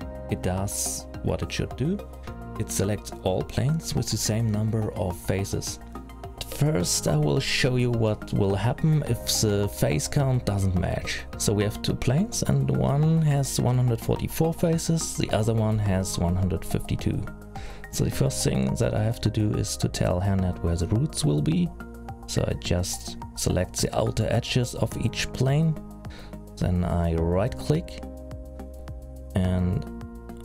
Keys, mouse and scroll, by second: 2.9 l, 4.0 p, 10.9 scroll down 2, 12.9 click, 13.9 click, 15.2 click, 16.2 middle click, 16.9-17.9 scroll up 7, 17.9 click, 19.4 click, 20.8 click, 21.2 ctrl+click, 21.9 middle click, 24.2 shift+click, 25.3 ctrl+click, 28.2 right click, 30.1 right click.